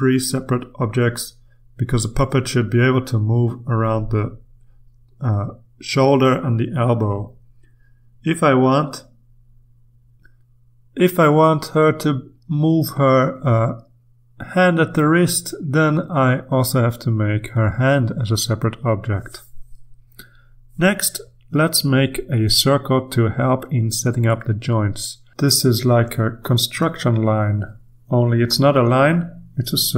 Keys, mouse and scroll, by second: 1.9 click, 2.9-4.5 drag, 4.9 click, 6.0-7.9 drag, 8.4 ctrl+z, 9.1 ctrl+click, 10.0 click, 11.0-15.1 drag, 16.8 click, 18.3 click, 24.2 click, 26.1 click, 27.7-29.8 typing.